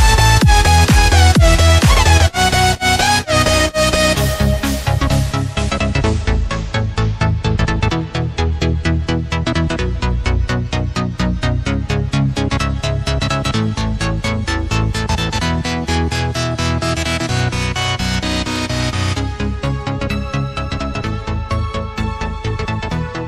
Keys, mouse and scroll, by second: 0.9 KP_7, 1.5-3.0 scroll up 7, 3.0 click, 3.4-4.5 scroll up 6, 4.5 click, 5.4-6.6 scroll up 4, 6.6-12.2 drag, 13.1 click, 13.7-14.5 scroll down 7, 14.5 click, 15.5 click, 16.1-17.3 scroll up 5, 17.3 ctrl+z, 17.8 ctrl+z, 18.5 ctrl+z, 19.6-23.2 drag.